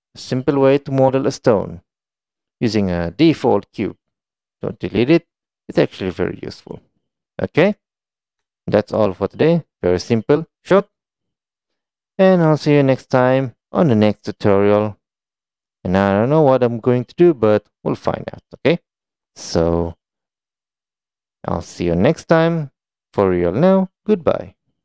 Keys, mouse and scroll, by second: 1.1-1.5 middle drag, 2.2 shift+middle drag, 7.9-8.2 middle drag, 8.5 middle click, 10.8 shift+middle click, 11.4-12.4 middle drag, 12.6 shift+middle click, 13.4-13.8 middle drag.